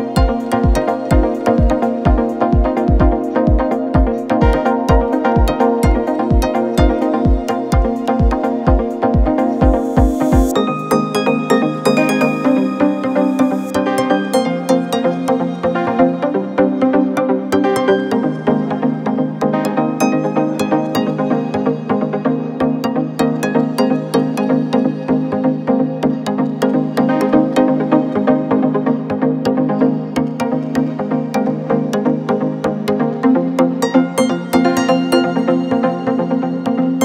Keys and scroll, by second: 9.7 ,, 30.3 shift+Left, 32.4 ], 35.4 ].